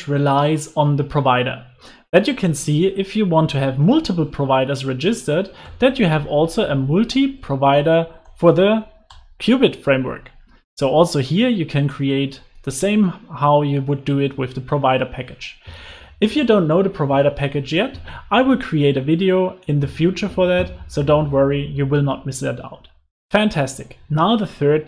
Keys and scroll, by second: 2.3 alt+Return, 8.2 Return, 12.5 super+z, 13.1 super+z, 13.6 super+s, 22.8 super+s.